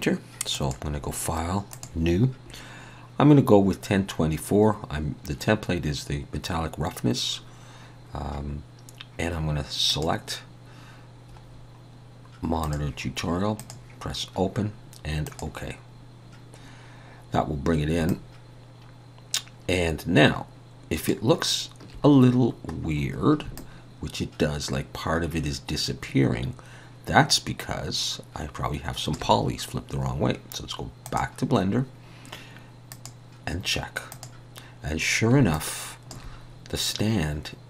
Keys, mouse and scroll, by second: 32.9 click, 35.5 alt+click, 36.8 middle click.